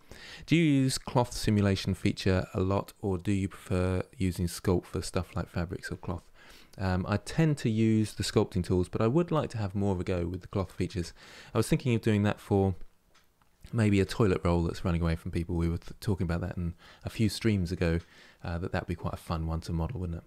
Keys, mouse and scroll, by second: 6.6-7.7 scroll down 1, 7.7 middle click, 8.4 scroll down 2.